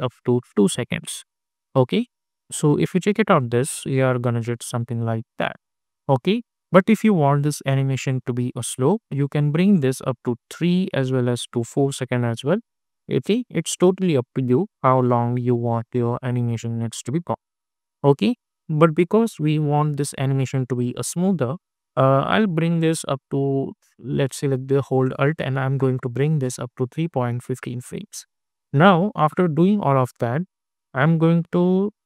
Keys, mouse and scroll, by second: 2.2 space, 4.8 space, 8.4 alt+space, 8.8-12.2 alt+drag, 12.2 space, 14.1 click, 14.6 space, 18.1 space, 19.5 -, 20.7-22.9 drag, 22.9-26.7 alt+drag, 26.7 space, 28.4-32.0 drag.